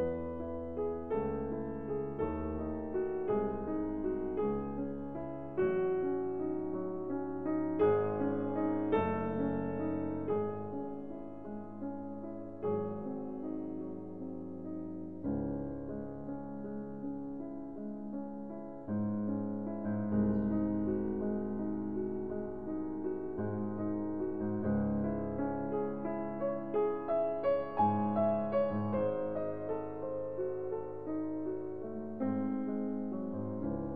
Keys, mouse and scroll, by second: 0.3 ctrl+r, 2.3-5.4 drag, 4.6 Tab, 5.6 Tab, 6.4-8.0 middle drag, 8.8 Tab, 13.8-15.6 ctrl+alt+shift+drag, 18.1-20.0 middle drag, 23.8-25.8 drag, 26.6 Tab, 28.0 middle click, 28.6 middle click, 29.3 ctrl+z, 29.6 ctrl+z, 29.8 ctrl+z, 30.6-32.2 middle drag.